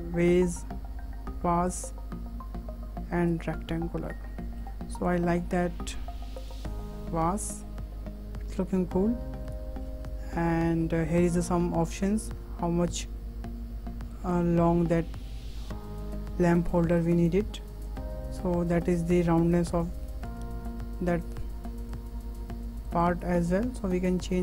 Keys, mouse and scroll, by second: 4.1-5.1 middle drag, 5.1-7.1 drag, 7.1 scroll up 2, 7.5-11.9 shift+middle drag, 11.9-14.3 drag, 14.7-15.1 scroll down 2, 15.1-17.9 shift+middle drag, 17.9-19.7 drag, 20.3-21.4 drag, 21.9-23.0 drag, 23.8-24.4 drag.